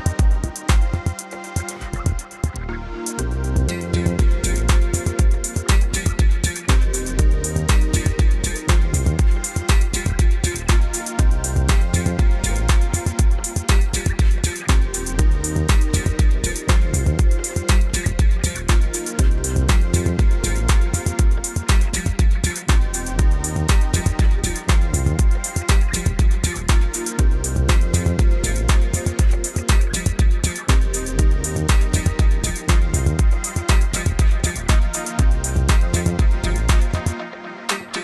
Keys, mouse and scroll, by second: 3.0 click, 7.7 F10, 11.7 F9, 13.0 click, 13.9 space, 29.7 z, 30.0 click, 32.2 click, 36.5 click.